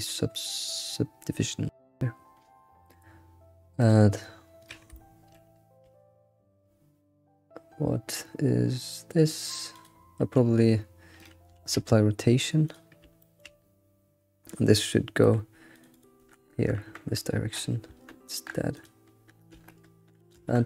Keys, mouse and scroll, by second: 3.8-8.0 drag, 4.8 scroll down 2, 5.0-8.0 shift+middle drag, 9.8-11.3 drag, 11.6 ctrl+a, 13.2-13.7 shift+middle drag, 13.7-14.0 scroll down 4, 14.8-15.9 drag, 15.9-20.6 drag.